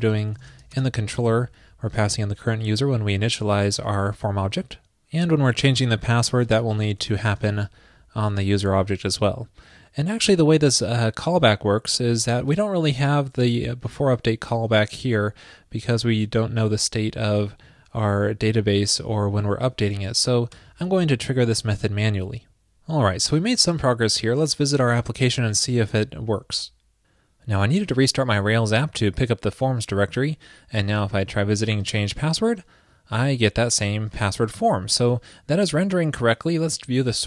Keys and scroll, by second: 25.7 super+s.